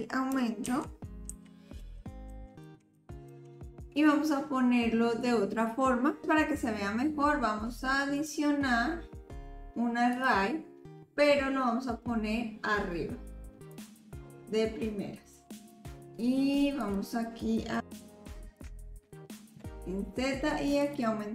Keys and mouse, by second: 0.7 ctrl+z, 1.3 ctrl+z, 1.8 ctrl+z, 2.3 ctrl+z, 2.6 ctrl+z, 3.0 ctrl+z, 3.3 ctrl+z, 3.9 click, 8.3-10.2 drag, 13.7-15.7 drag, 16.8 click, 18.0-19.6 drag, 20.8-21.3 drag.